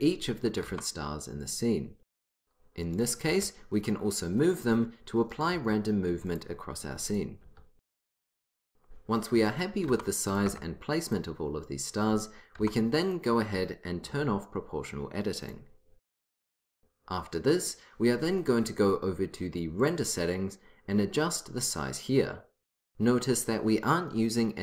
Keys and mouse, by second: 1.1-2.7 drag, 1.4 s, 2.9-4.4 drag, 3.3 g, 4.5 click, 5.4 click, 5.6 g, 7.5-8.9 drag, 7.5 g, 8.9 s, 9.5-10.5 drag, 10.0 s, 10.5 g, 12.7 click, 12.7 s, 13.7-16.2 drag, 16.3 click, 19.9-21.9 drag.